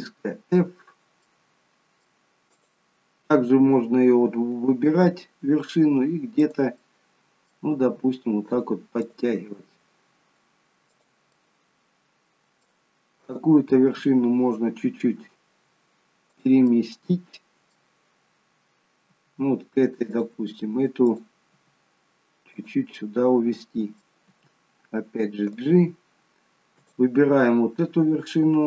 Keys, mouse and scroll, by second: 1.3 middle click, 2.5 click, 4.9 g, 6.8 middle click, 7.7 g, 9.0 click, 9.3 g, 11.3 middle click, 13.3 click, 13.9 g, 16.6 middle click, 19.0 g, 21.1 click, 21.5 g, 23.0 middle click, 24.3 g, 26.8 click, 27.5-28.6 scroll up 2.